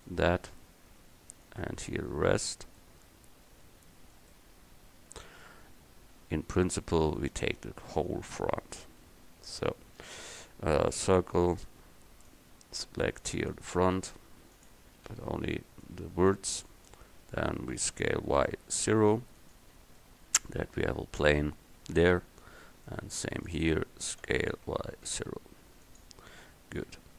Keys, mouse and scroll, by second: 5.5 middle click, 9.7 a, 11.0 c, 15.5 a, 15.5 c, 17.8 s, 21.9 a, 22.5 c, 23.6-25.5 drag, 24.3 s, 27.1 KP_1.